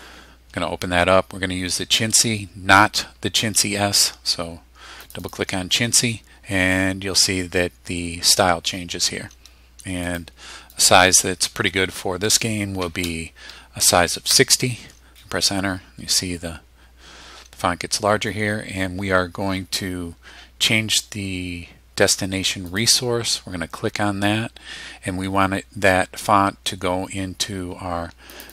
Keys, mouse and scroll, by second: 5.0 click, 10.1 click, 10.7 click, 12.8 6, 13.0 0, 14.3 Return, 22.7 click, 28.3 click.